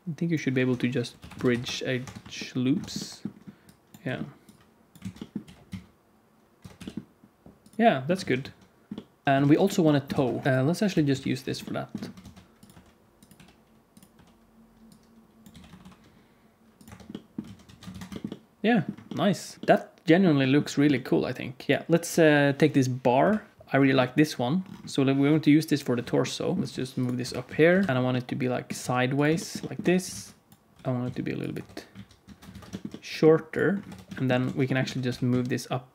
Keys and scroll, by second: 0.6 F3, 1.9 Tab, 2.7 Tab, 4.0 g, 4.4 Tab, 4.5 alt+z, 4.9 alt+z, 5.4 g, 6.6 Tab, 6.7 g, 7.7 ctrl+a, 7.7 ctrl+s, 7.7 alt+shift+z, 8.1 alt+shift+z, 9.2 alt+shift+z, 10.1 ctrl+s, 10.8 KP_1, 11.0 KP_3, 12.1 shift+d, 12.6 r, 13.3 g, 14.1 r, 14.9 Tab, 14.9 alt+z, 15.4 g, 16.8 Tab, 17.4 alt+z, 17.6 alt+a, 17.9 ctrl+s, 21.7 shift+c, 23.1 KP_Decimal, 25.2 KP_1, 26.6-28.7 typing, 29.7 Tab, 30.0 alt+z, 30.7 g, 31.5 Tab, 31.9 alt+z, 32.2 alt+a, 32.5 ctrl+s, 33.8 Tab, 34.4 alt+z, 34.8 a, 35.0 g.